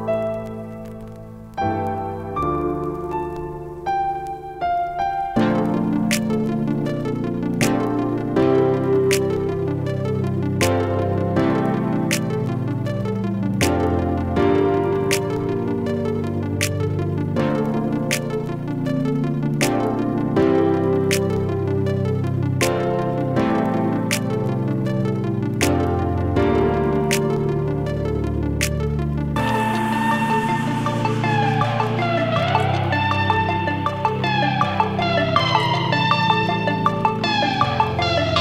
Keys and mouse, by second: 8.9 ctrl+g, 9.6 click, 10.8-12.1 typing, 12.7 Return, 14.5 click, 14.6 click, 19.1 h, 19.9 a, 22.1-24.0 typing, 25.5 n, 26.2 e, 27.1 w, 27.4 space, 29.5 typing, 32.7 e, 34.3-35.0 typing, 36.2 click.